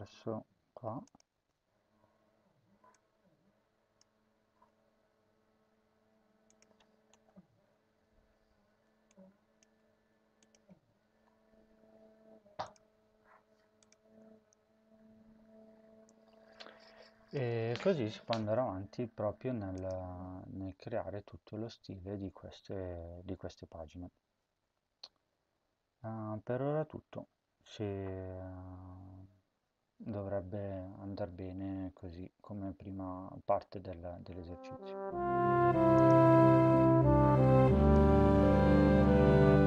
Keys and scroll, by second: 6.9 Return, 7.2 ctrl+v, 9.5 BackSpace, 9.8 BackSpace, 10.9 ctrl+s.